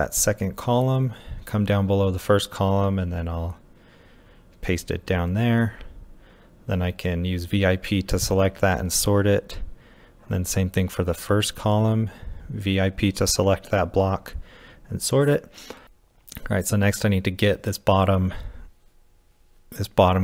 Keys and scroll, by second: 0.0-2.5 typing, 3.8 typing, 5.8 typing, 6.5 Escape, 6.9 p, 8.1-10.7 typing, 12.3-15.8 typing, 17.4-18.3 typing, 19.6 ctrl+v.